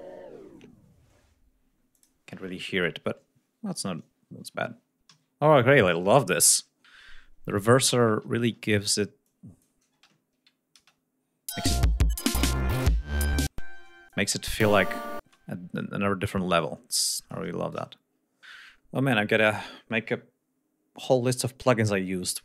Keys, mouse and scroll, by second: 0.1 ctrl+scroll up 2, 2.3 click, 6.0 ctrl+s, 6.5 ctrl+scroll down 2, 7.5 ctrl+scroll down 2, 9.7-10.2 drag, 10.3 space, 10.6 ctrl+scroll up 2, 11.2 ctrl+space, 14.0 space, 14.1 click, 15.2 space, 17.1-18.4 drag.